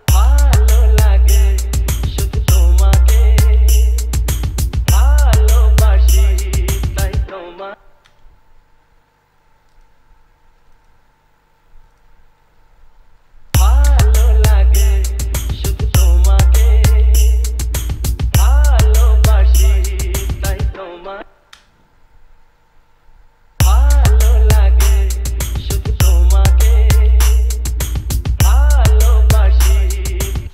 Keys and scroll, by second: 0.1 space, 7.9 space, 13.7 space, 21.9 space, 23.9 space.